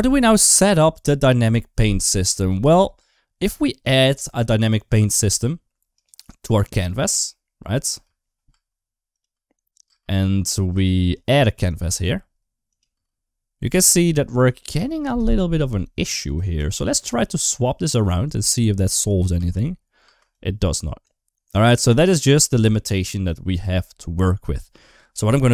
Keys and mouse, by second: 2.4 space, 2.8 space, 7.7 space, 8.3 space, 9.1 space, 9.7 space, 12.6 click, 13.5 space, 19.2 space, 19.9 space.